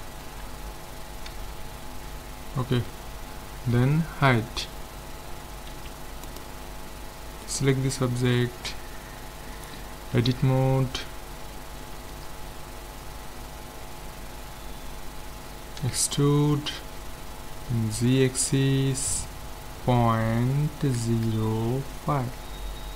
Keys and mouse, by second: 1.3 z, 1.8 z, 4.3 h, 5.7 ctrl+s, 7.5-9.1 drag, 10.1 Tab, 11.8 a, 12.1 a, 13.0-15.3 middle drag, 15.8 e.